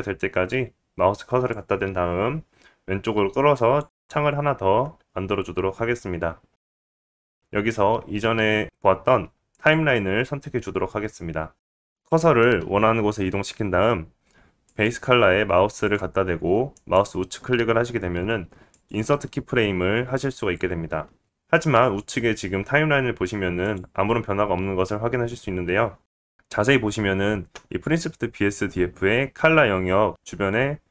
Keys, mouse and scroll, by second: 6.3 click, 14.7-15.8 drag, 16.7 click, 16.7 right click, 18.8-30.9 right drag, 24.8 click.